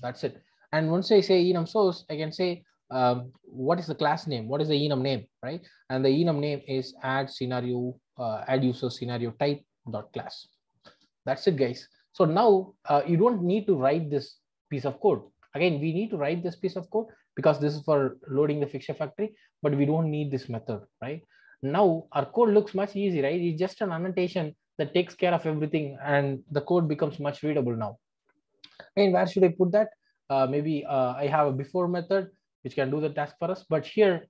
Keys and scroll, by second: 0.0 Return, 2.7 Return, 9.0 Return, 18.5 super+x, 20.9 Delete, 26.7 ctrl+alt+o, 30.8 super+b.